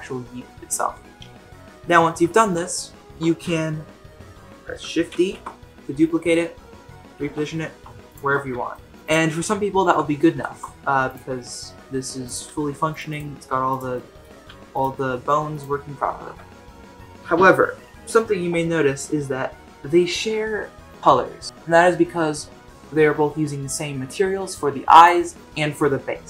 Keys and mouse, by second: 5.2 shift+d, 8.7 shift+middle drag, 9.8 ctrl+Tab, 10.4 shift+middle drag, 11.0 click, 11.4 r, 12.4 g, 13.1 click, 13.3 r, 13.9-14.2 middle drag, 14.4 g, 14.9-15.3 middle drag, 15.5 click, 16.1 ctrl+Tab.